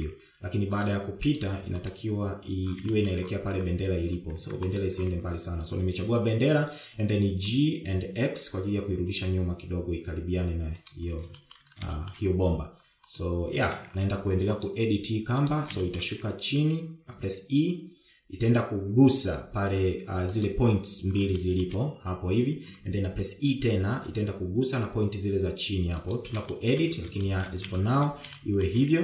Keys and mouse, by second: 0.4 shift+middle click, 0.9 shift+middle click, 1.7 g, 2.8 click, 2.9 g, 4.4 shift+middle click, 5.9 Tab, 6.1 click, 8.8 g, 12.8 shift+middle drag, 13.4 shift+middle drag, 14.6 click, 15.0 Tab, 16.1 g, 17.3 shift+middle click, 18.6 e, 22.8 shift+middle click, 24.2 e, 28.0 shift+middle click, 28.7 shift+middle click.